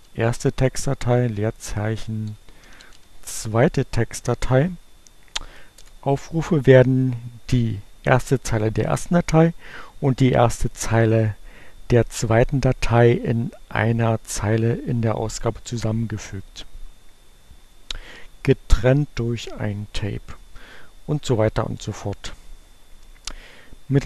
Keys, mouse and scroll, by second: 0.0-0.6 typing, 1.7-3.4 typing, 5.4 Return.